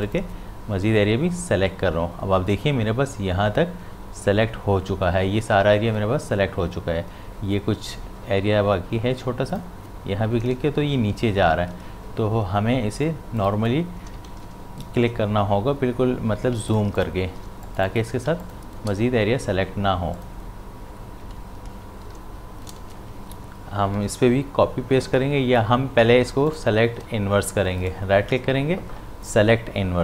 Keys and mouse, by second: 9.5 shift+click, 11.7 ctrl+z, 13.3 click, 14.3 ctrl+z, 16.6 space, 16.7 ctrl+click, 17.5 ctrl+space, 17.7 click, 18.4 ctrl+click, 21.9 ctrl+z, 26.2 ctrl+space, 26.5 ctrl+alt+click, 27.8 right click.